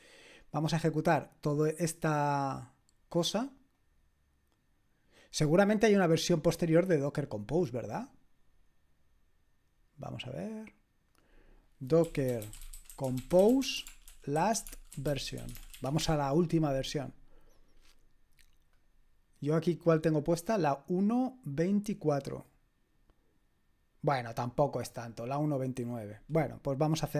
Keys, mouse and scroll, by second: 0.7-2.4 drag, 3.7 click, 6.1 click, 11.0 click, 11.8-16.4 typing, 18.7 click, 19.7-27.1 drag.